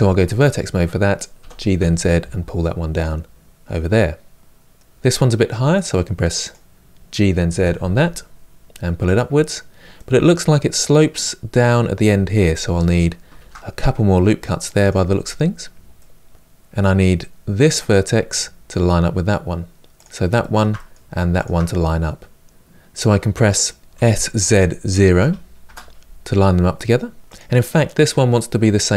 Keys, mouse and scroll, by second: 0.2 click, 1.2 g, 3.6-5.6 middle drag, 5.6 click, 6.2 click, 7.3 g, 9.6-13.1 middle drag, 13.1 ctrl+r, 15.7-19.7 middle drag, 19.7 click, 20.1-21.2 shift+middle drag, 21.2 shift+click, 23.8 s, 26.5 middle click, 27.2 click.